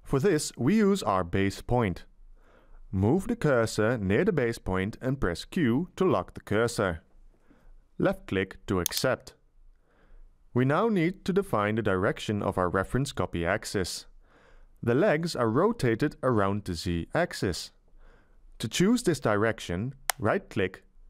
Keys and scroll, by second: 5.6 q.